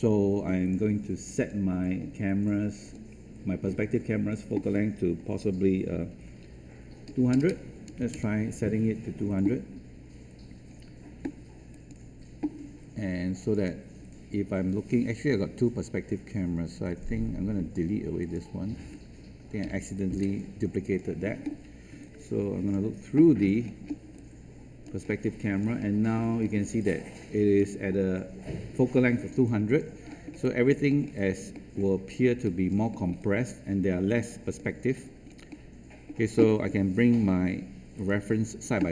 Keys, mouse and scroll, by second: 7.0 KP_2, 7.3 KP_0, 8.1 Return, 10.3 scroll down 1, 10.6-11.7 scroll up 1, 11.7 click, 19.6 Delete, 20.8 click, 21.9 space, 23.3-24.0 scroll down 1, 24.3 alt+click, 25.0 scroll up 1, 25.7 alt+middle click, 26.7 alt+click, 29.4 alt+click, 30.0 alt+middle click, 30.4 alt+click, 30.8 alt+middle click, 31.5 alt+middle click, 32.1 alt+click, 32.9 alt+middle click, 33.3-34.5 alt+drag, 35.0 alt+click, 35.4 alt+middle click, 37.9-38.9 drag.